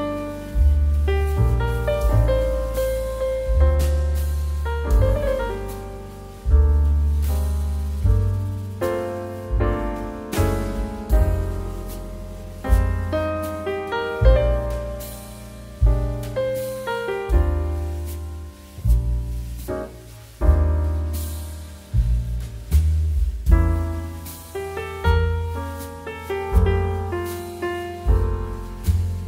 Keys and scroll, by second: 10.8 Delete, 25.6 z, 28.2 space.